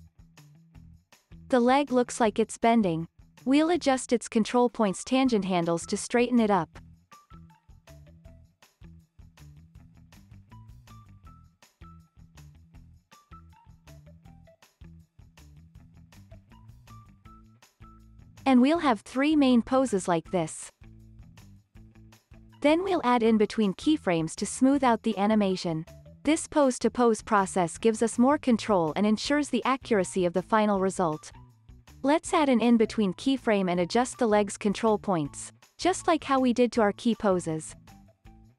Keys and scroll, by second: 18.1 x, 19.9 z, 20.7 x, 21.6 z.